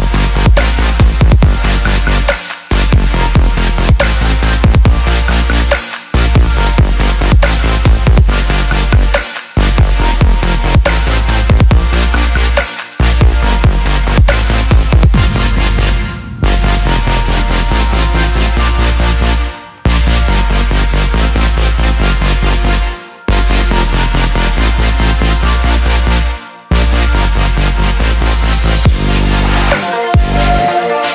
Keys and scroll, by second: 6.9 ctrl+j.